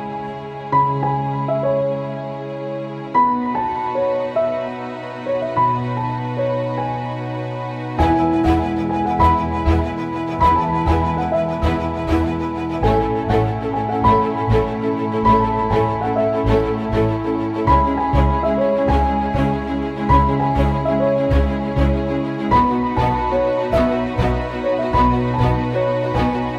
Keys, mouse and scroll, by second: 3.9 ctrl+c, 4.2 ctrl+v, 4.9-6.7 drag, 7.0 click, 7.4 click, 8.0 right click, 8.8 click, 9.9 right click, 10.6 click, 10.6-14.9 drag, 15.3 click, 18.0-18.5 scroll down 1, 18.8 click, 20.7 click, 23.8 scroll up 1, 24.0 click, 24.1 right click, 25.0-26.5 drag.